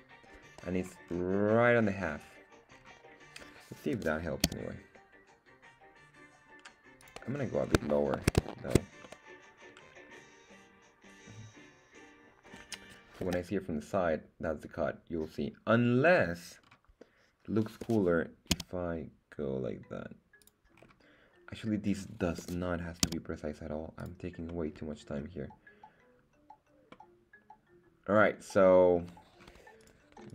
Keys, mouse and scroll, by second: 0.7-1.2 scroll up 4, 2.0 scroll down 2, 2.8-3.1 scroll down 3, 3.9 g, 4.4 z, 7.0 click, 7.3-7.8 scroll up 3, 7.9 shift+middle click, 8.5 shift+middle drag, 9.1-13.3 middle drag, 13.3 KP_3, 16.6-17.8 scroll up 2, 17.8 g, 18.5 z, 20.4 click, 20.7 scroll down 2, 22.4 g, 23.0 z, 24.0 click, 24.5-25.3 middle drag, 26.9-29.2 middle drag, 29.5 scroll down 1, 29.9 right click.